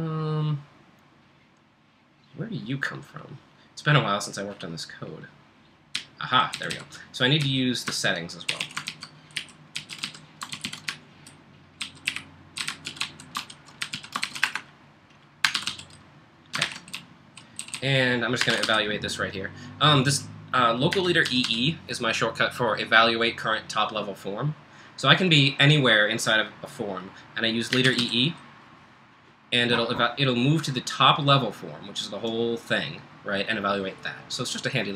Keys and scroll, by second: 5.9-6.3 k, 6.5 k, 6.7 k, 7.4 k, 8.5-16.0 typing, 8.9 ctrl+k, 16.6 ctrl+j, 17.2-19.1 typing, 20.9-21.8 typing, 27.5-28.5 typing.